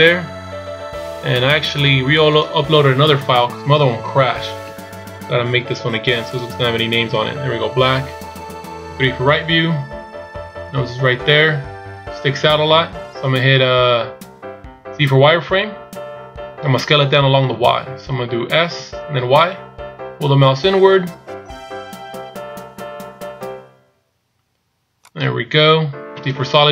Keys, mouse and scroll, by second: 2.7 click, 8.9 KP_3, 11.1-12.1 scroll up 2.